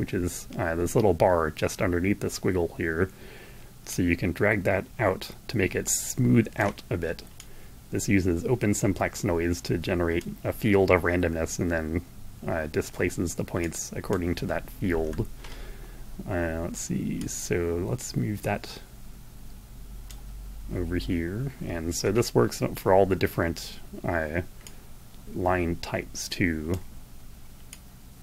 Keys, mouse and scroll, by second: 3.4-6.3 drag, 6.9-9.9 drag, 13.1 click, 14.1 p, 16.5-19.7 drag, 21.5 Right, 23.7-26.4 drag, 27.0-28.2 drag.